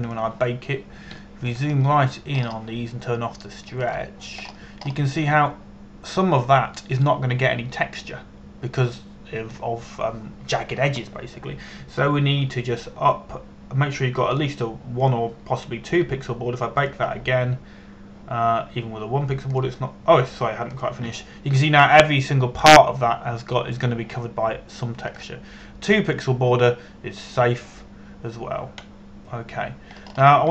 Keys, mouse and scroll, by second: 0.2 click, 0.5 KP_0, 1.1 Return, 1.7 click, 2.9 shift+middle click, 3.4-4.0 scroll up 1, 5.5 click, 6.1-6.8 scroll up 1, 15.9 scroll up 1, 16.1 click, 23.5-26.8 scroll down 1, 26.8 click, 30.1-30.5 scroll down 1.